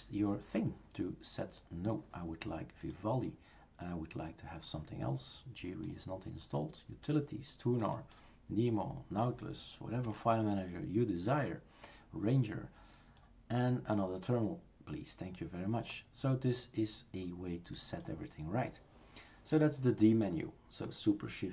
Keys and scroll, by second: 10.0 Escape.